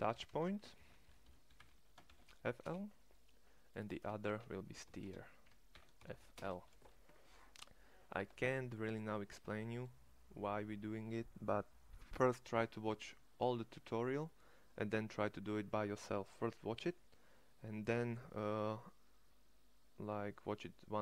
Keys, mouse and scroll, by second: 4.9 e.